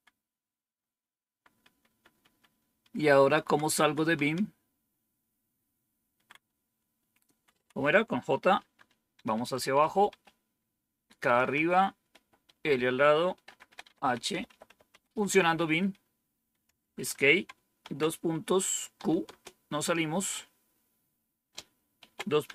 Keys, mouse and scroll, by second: 10.4-16.6 typing, 16.7 Escape, 16.9 Escape, 18.6-19.4 typing, 21.7-22.5 typing.